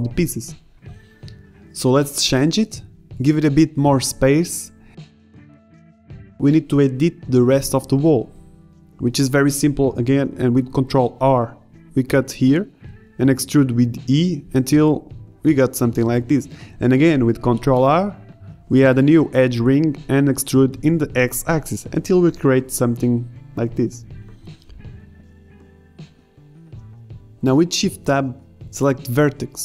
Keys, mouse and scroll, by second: 1.6 middle click, 3.0 Tab, 6.7 ctrl+r, 10.1 a, 10.4 b, 12.7 ctrl+Tab, 13.1 click, 14.2 e, 14.3 click, 17.1 ctrl+r, 19.1 ctrl+Tab, 20.7 ctrl+Tab, 23.3 KP_7, 23.9 e, 25.9 click, 27.6 ctrl+z, 27.6 a, 28.4 ctrl+Tab.